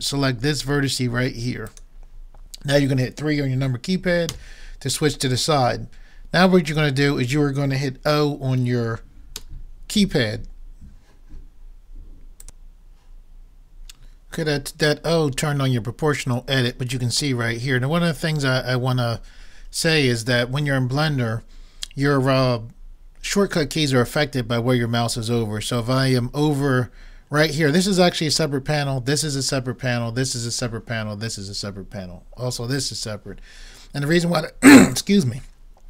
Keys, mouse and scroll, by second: 1.7-3.4 drag, 4.3 KP_3, 9.3 o.